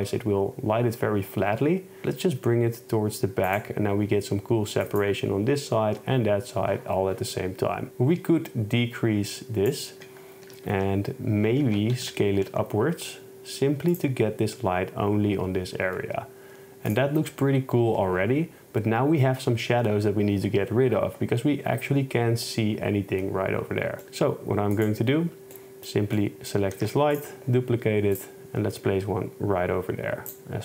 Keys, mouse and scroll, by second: 10.5 s, 10.8 z, 11.7 shift+Tab, 12.1 s, 12.1 a, 12.5 z, 14.0 click, 24.8 click, 25.6 middle click, 26.8 shift+d, 27.2 click, 28.4 shift+Tab.